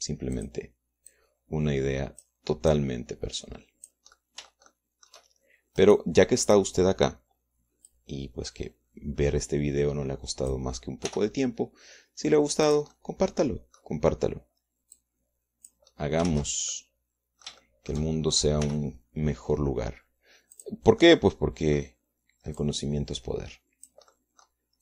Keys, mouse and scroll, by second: 0.7 r, 1.9-3.9 drag, 4.2-5.6 drag, 5.7-6.7 shift+middle drag, 7.3 right click, 7.9 right click, 9.4-12.2 drag, 12.6 r, 14.2 click, 14.5-15.5 middle drag, 16.5 click, 17.8 ctrl+z, 18.2-19.6 ctrl+drag, 19.6 shift+middle click, 20.1 r, 22.1 click, 22.5 click, 24.1 click.